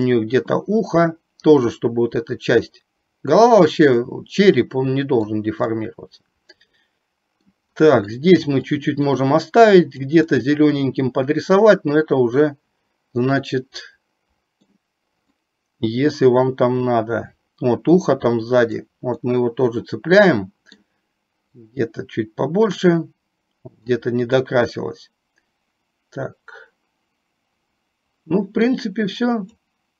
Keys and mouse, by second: 0.7-5.4 drag, 5.7-7.6 middle drag, 7.8 middle click, 8.8 click, 9.4 click, 10.3-14.7 middle drag, 15.4-18.8 drag, 19.3-20.8 middle drag, 21.7-24.1 drag, 24.4-28.8 middle drag, 29.3 click.